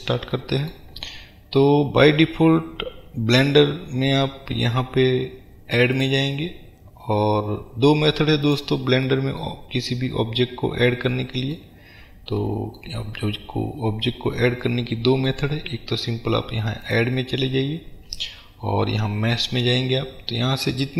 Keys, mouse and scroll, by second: 6.0-8.6 drag, 8.6-16.9 middle drag, 9.8-11.1 scroll up 2, 11.1 scroll up 1, 14.1-14.7 scroll down 1, 16.9-20.9 drag.